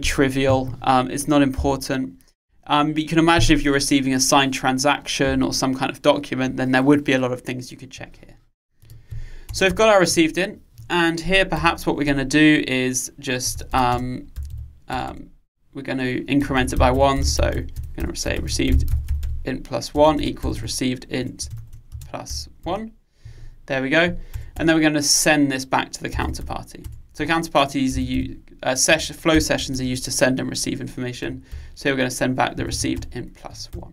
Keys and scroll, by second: 21.3 Return, 27.0 Return, 33.0 Return.